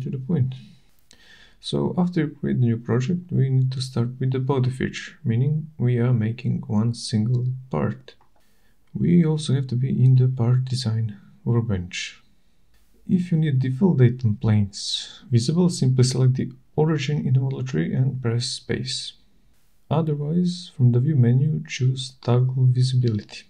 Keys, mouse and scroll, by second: 0.1 shift+right click.